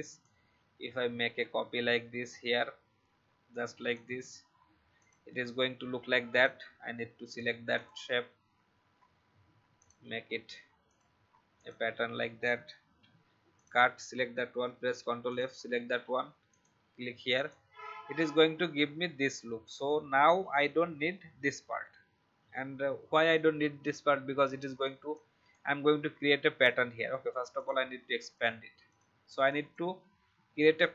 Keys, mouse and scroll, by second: 0.2-3.9 alt+drag, 4.9-11.5 drag, 12.8 ctrl+x, 13.5 click, 14.6 ctrl+f, 15.2 shift+click, 16.4 alt+click.